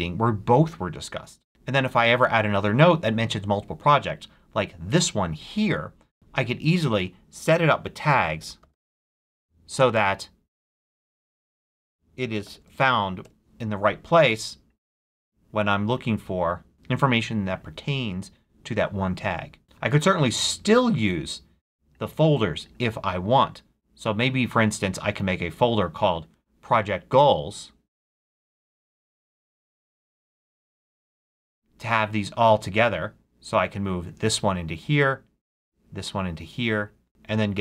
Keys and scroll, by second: 7.5-9.2 typing, 9.9 Return, 11.6-13.3 typing, 27.6-31.1 typing.